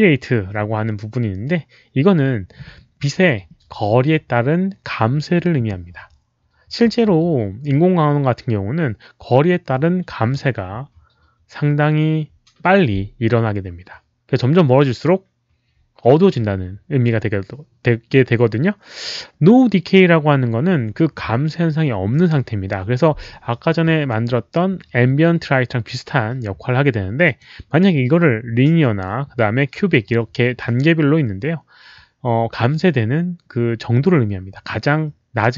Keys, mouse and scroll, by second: 27.2 click.